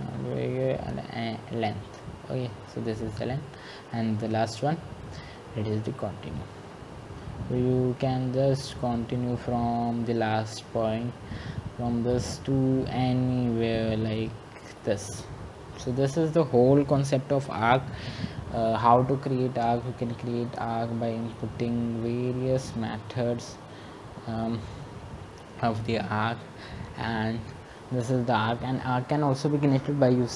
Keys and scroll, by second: 5.6-6.3 typing.